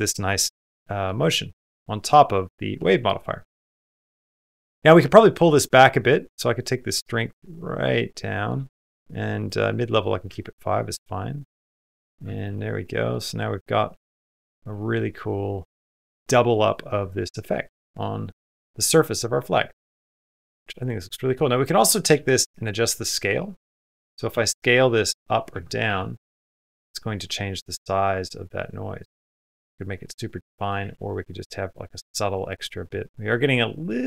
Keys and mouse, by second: 0.0 middle click, 1.1 middle click, 1.9 click, 2.2 middle click, 2.9 middle click, 3.3 space, 5.5-8.4 shift+drag, 8.7 click, 9.9 middle click, 10.4 middle click, 10.4 space, 11.4 middle click, 12.2 shift+middle click, 12.4 middle click, 13.4 middle click, 14.5 middle click, 15.1 middle click, 17.3 middle click, 17.8 middle click, 18.5-19.5 middle drag, 19.8 middle click, 20.3 middle click, 20.7 middle click, 21.4 click, 24.3 s, 25.7 space, 26.0 s, 30.6 space, 31.2 middle click, 32.3 middle click, 33.2 middle click.